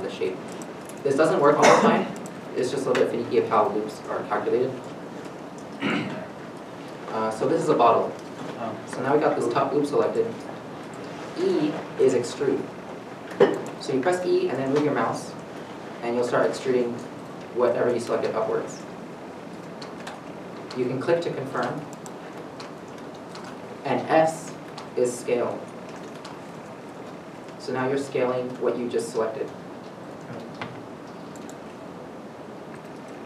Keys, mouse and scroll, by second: 2.3 shift+middle click, 2.3 middle click, 4.8 middle click, 5.0 shift+middle click, 12.1 middle click, 12.1 e, 20.4 e, 20.4 middle click, 21.9 shift+middle click, 25.1 s, 33.1 s, 33.1 right click.